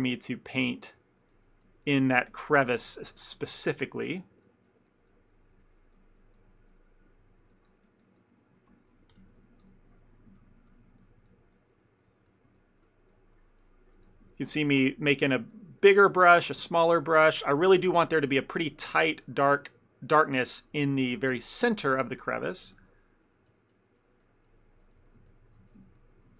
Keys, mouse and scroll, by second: 0.1 ctrl+click, 0.2 ctrl+click, 0.6 middle click, 1.0 middle click, 1.4 ctrl+click, 1.5 ctrl+click, 2.2 ctrl+click, 2.7 middle click, 3.4 ctrl+click, 3.8 middle click, 4.3 ctrl+click, 4.5 ctrl+click, 5.0 ctrl+click, 5.2 ctrl+click, 5.5 middle click, 5.7 ctrl+middle click, 6.0 ctrl+click, 6.3 ctrl+click, 6.4 ctrl+click, 6.6 ctrl+click, 6.8 ctrl+click, 7.0 middle click, 7.4 ctrl+click, 7.6 ctrl+click, 7.9 ctrl+click, 8.2 ctrl+click, 8.3 ctrl+click, 8.7 shift+middle click, 9.0 middle click, 9.6 f, 10.5 ctrl+click, 10.8 ctrl+click, 11.3 ctrl+click, 11.6 ctrl+click, 11.9 ctrl+click, 12.2 f, 12.7 ctrl+click, 13.0 ctrl+click, 13.2 ctrl+click, 13.7 ctrl+click, 14.0 f, 14.4 ctrl+click, 14.6 ctrl+click, 14.9 middle click, 15.4 ctrl+click, 15.6 ctrl+click, 15.9 ctrl+click, 16.2 f, 16.7 ctrl+click, 16.9 ctrl+click, 17.2 ctrl+click, 17.5 ctrl+click, 17.9 ctrl+click, 18.1 ctrl+click, 18.3 middle click, 18.4 shift+middle click, 19.0 ctrl+click, 19.2 ctrl+click, 19.5 ctrl+click, 19.7 ctrl+click, 20.6 middle click, 20.8 middle click, 20.9 shift+middle click, 22.2 middle click, 22.8 f, 23.0 middle click, 23.6 ctrl+click, 23.8 ctrl+click, 24.3 ctrl+click, 24.6 ctrl+click, 24.9 f, 25.4 ctrl+click, 25.7 f, 26.1 ctrl+click.